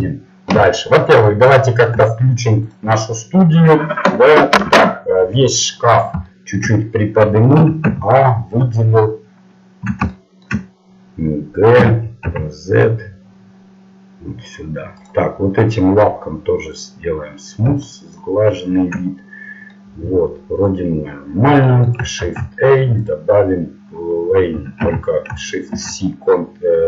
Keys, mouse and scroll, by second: 1.4-2.6 middle drag, 2.6-5.3 drag, 5.3 KP_1, 6.0 middle click, 7.6 a, 7.9 a, 11.8 g, 15.0-16.9 right drag, 16.9-19.7 drag, 19.7 middle click, 24.8 ctrl+z, 25.7 shift+c.